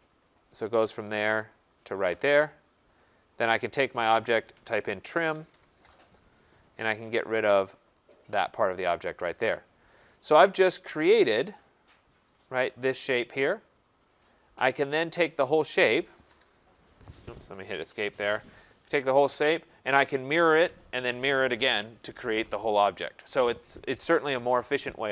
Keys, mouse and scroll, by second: 0.2 click, 1.4-2.2 typing, 1.8 click, 3.3 click, 4.2-5.9 typing, 6.7 Return, 7.8 click, 8.6-9.3 scroll, 9.3 click, 9.8-10.4 scroll, 10.4 click, 11.3 right click, 11.5 scroll, 14.5 click, 15.2 click, 16.2 Return, 16.2 middle click, 17.4 Escape, 17.7 Escape, 17.8 Escape, 19.0 click, 23.8 click.